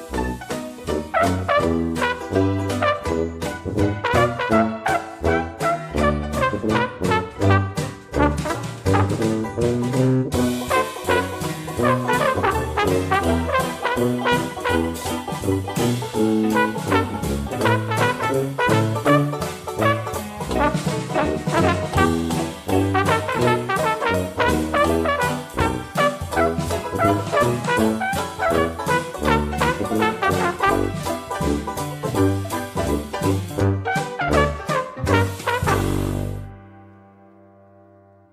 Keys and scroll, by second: 18.4 5.